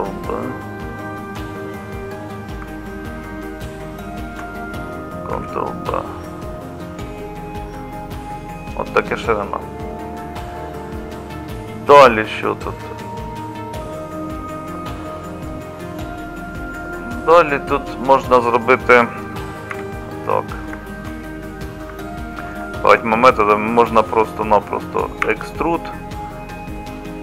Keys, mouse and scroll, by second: 5.3 ctrl+b, 19.7 3, 25.2 e.